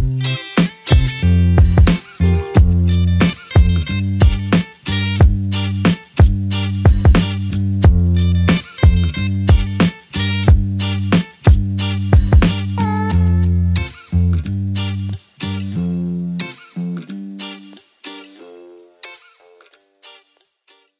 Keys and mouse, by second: 1.7 double click, 3.4 alt+click, 12.9 alt+click.